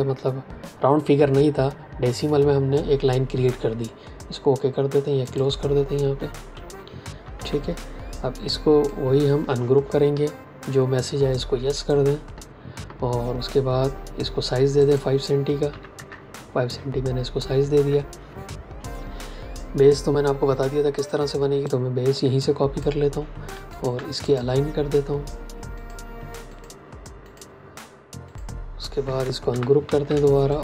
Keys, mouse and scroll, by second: 5.1 click, 7.2 v, 8.2 click, 10.0 ctrl+shift+g, 11.6 click, 14.7 click, 15.6 KP_5, 15.8 KP_Enter, 19.7 click, 23.6 shift+click, 29.4-29.8 typing, 30.5 click.